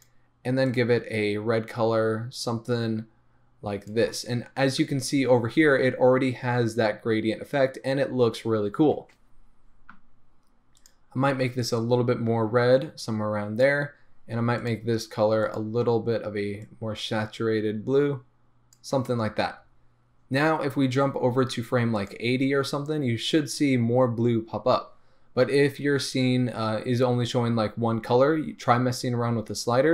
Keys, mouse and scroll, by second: 11.7 click, 14.7 drag, 15.5 click, 22.2 click.